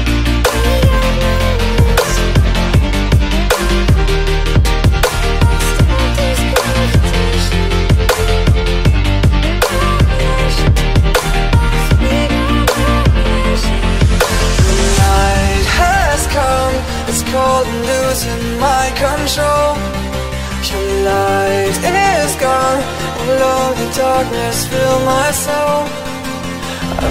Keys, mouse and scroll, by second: 0.3 click, 1.9 click, 2.3 click, 2.4 z, 3.7 click, 4.6 z, 5.3 click, 6.1 click, 7.2 click, 7.8 click, 9.8 click, 10.7 click, 12.5 click, 12.8 click, 12.9 F9, 17.5 click, 18.4 click, 20.3 click, 21.0 click, 21.7 scroll, 22.6-23.0 scroll, 23.8 middle click, 25.6 middle click, 26.4 right click.